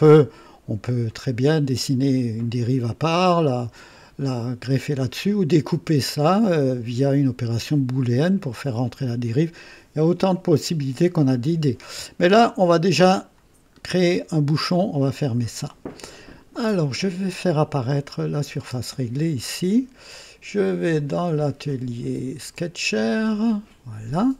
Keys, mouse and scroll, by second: 1.0 click, 4.7-5.3 drag, 11.3-11.9 drag, 12.9 click, 13.6-14.0 scroll up 2, 14.2 right click, 16.5 scroll up 1, 18.0 click, 18.6 space, 20.8 click, 22.4 click.